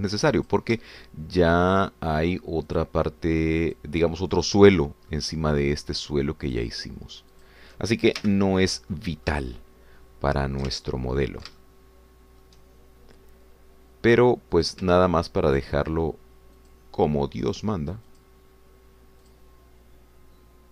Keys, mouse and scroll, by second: 0.3 f, 1.4 click, 2.8 shift+click, 3.7 shift+click, 4.7 shift+click, 5.3 shift+click, 6.1 shift+middle click, 7.6 shift+click, 8.5 shift+click, 9.2 shift+f, 9.9-12.6 drag, 12.6-13.6 ctrl+shift+drag, 15.7 shift+click, 16.6 shift+click, 17.7 shift+click, 18.6 shift+click, 19.2 shift+click, 20.2 shift+click.